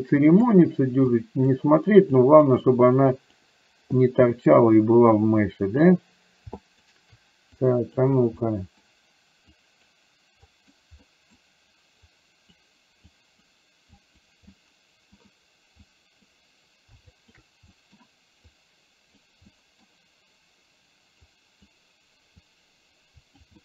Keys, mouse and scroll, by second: 0.3 click, 1.2 click, 2.3 click, 3.3 click, 4.0 middle click, 5.7 click, 6.7 shift+click, 7.7 click, 8.5 middle click, 9.7 click, 10.5 click, 11.0 middle click, 12.2 click, 13.2 click, 14.0 click, 14.5 middle click, 15.9 click, 17.2 shift+click, 17.8 middle click, 18.7 click, 19.5 middle click, 21.3 click, 22.5-23.5 drag.